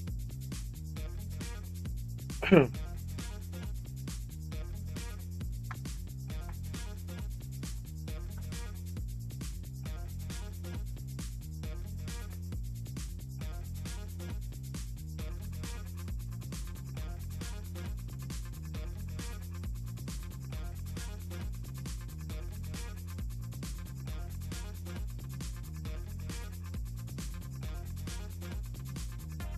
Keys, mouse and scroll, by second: 13.4 click, 14.8 click, 17.0 click, 19.2 click, 24.1 click, 26.4 click, 27.7 click.